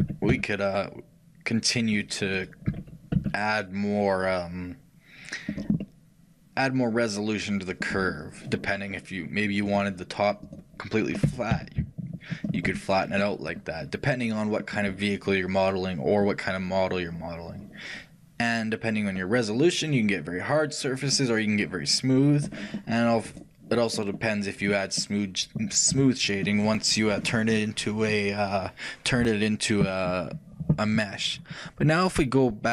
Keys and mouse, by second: 2.7 g, 5.9-10.3 middle drag, 10.3-13.3 right drag, 13.3-16.3 middle drag, 16.3-18.2 drag, 24.0-26.0 middle drag.